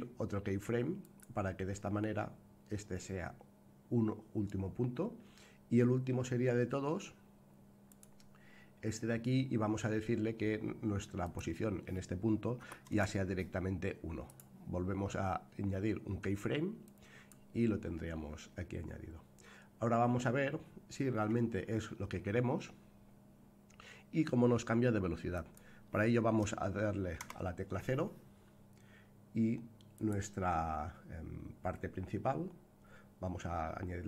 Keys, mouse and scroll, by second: 7.8 click, 11.2-14.2 drag, 14.2-17.2 right drag, 25.3 click, 27.1 KP_0, 29.9 click, 31.7-33.6 scroll up 7, 33.6-34.0 scroll down 1.